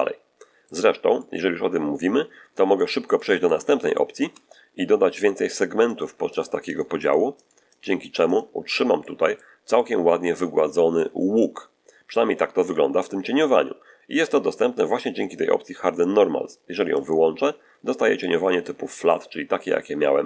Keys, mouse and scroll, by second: 1.0-2.9 middle drag, 3.0 middle click, 3.8 shift+middle click, 5.8 click, 6.2 click, 6.6 click, 7.3 click, 8.9 middle click, 9.6-11.0 middle drag, 16.9 click, 18.1-19.2 middle drag, 20.1-20.2 middle drag.